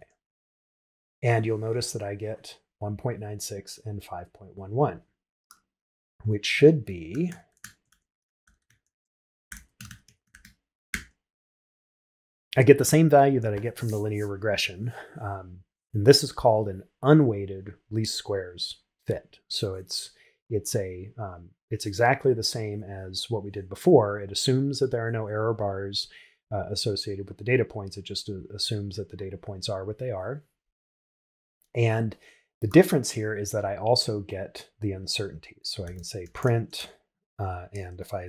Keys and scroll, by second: 7.9 shift+9, 10.9 shift+Return, 36.8 shift+9.